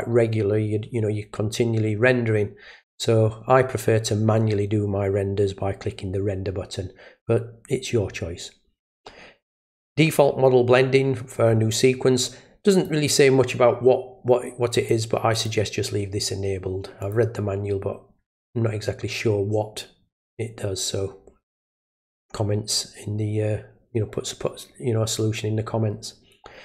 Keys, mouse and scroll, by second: 12.7 click, 14.7 click, 15.3 click, 17.0 click.